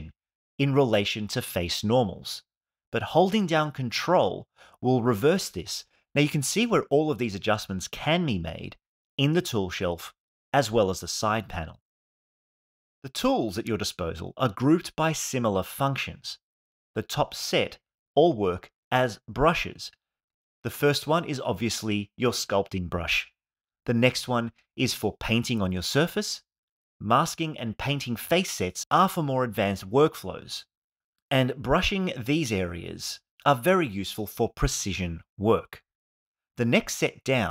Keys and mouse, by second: 4.1 ctrl+click, 24.3 click, 24.8 click, 25.5 click, 29.6 click, 32.3 click.